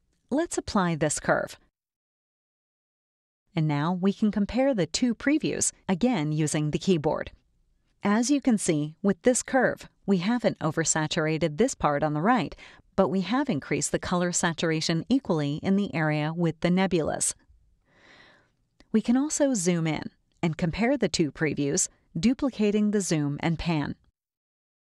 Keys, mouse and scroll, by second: 1.7 click, 2.6 click, 3.6 ctrl+Left, 4.2 ctrl+Right, 5.0 ctrl+Left, 5.8 ctrl+Right, 6.5 ctrl+Left, 7.2 ctrl+Right, 9.2-11.5 drag, 11.9 click, 12.7 ctrl+Left, 13.4 ctrl+Right, 14.4-17.5 drag, 18.7 ctrl+KP_Add, 20.1 space, 20.3-22.0 drag, 23.0 click.